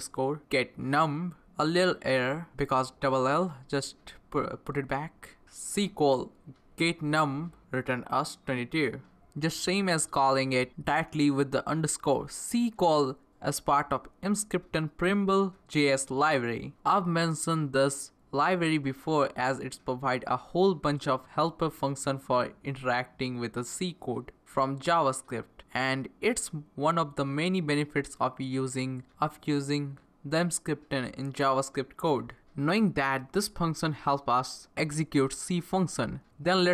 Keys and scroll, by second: 3.7 Down, 4.1 Up, 4.4 Left, 5.3 Left, 6.6 BackSpace, 7.1 Right, 7.6 Right.